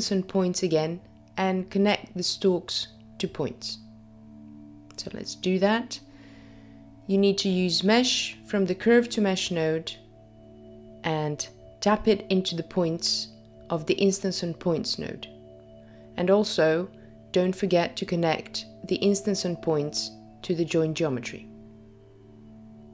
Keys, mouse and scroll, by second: 0.0 shift+a, 0.1 click, 14.6 click, 20.7 click.